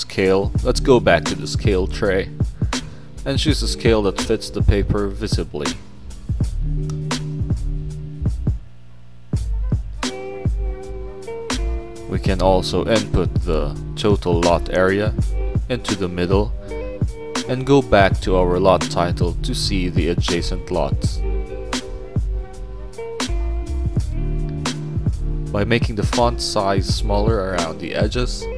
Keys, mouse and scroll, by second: 0.5 click, 1.6 click, 2.8 click, 3.9 click, 4.7 scroll down 2, 5.6 click, 6.8 click, 7.5 middle click, 7.9 click, 9.5 click, 9.8 middle click, 10.4 click, 10.9 scroll down 2, 11.0 middle click, 11.0 scroll, 11.7 middle click, 12.1 click, 13.0 click, 14.6 middle click, 15.6 click, 16.3 middle click, 16.6 click, 17.1 click, 18.1 middle click, 18.1 scroll, 18.4 scroll down 2, 18.8 scroll up 2, 19.1 middle click, 19.1 scroll down 2, 19.3 click, 22.5 click, 22.6 click, 23.6-26.4 typing, 26.6 click, 27.4 click, 27.6 click, 28.0-28.5 typing.